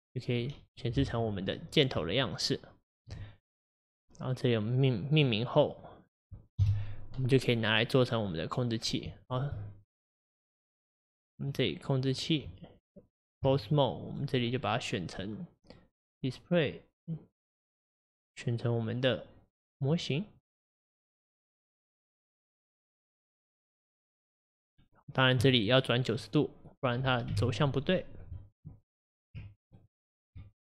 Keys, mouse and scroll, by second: 3.1 Tab, 5.2-6.1 middle drag, 6.1-6.6 scroll down 1, 6.6 KP_Divide, 9.3 ctrl+click, 10.8 click, 11.5 click, 13.4 Tab, 14.2 click, 21.5-23.7 drag, 24.7-25.5 scroll up 2, 25.5-26.2 scroll down 1, 26.2-27.3 middle drag, 27.3 KP_1, 29.8 Left.